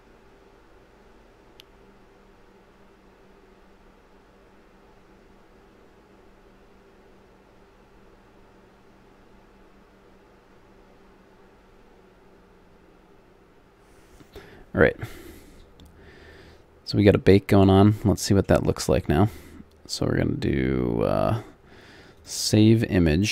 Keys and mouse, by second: 15.4-22.1 middle drag, 22.1-23.3 drag.